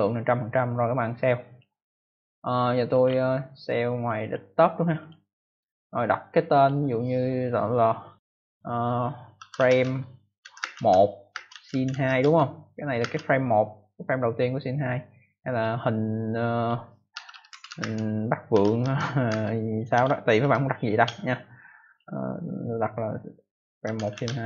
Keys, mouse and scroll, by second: 1.4 click, 2.9 scroll up 2, 4.3 scroll down 1, 4.9 click, 6.5 click, 9.0-13.5 typing, 16.3 click, 16.8-21.5 typing, 23.5-24.4 typing.